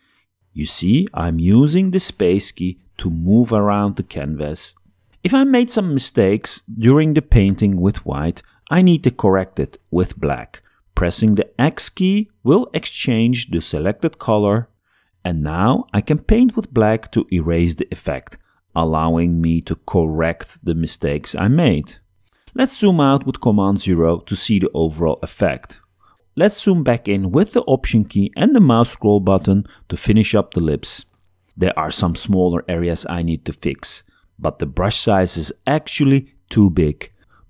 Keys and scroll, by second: 0.8 space, 11.8 x, 23.4 super+0.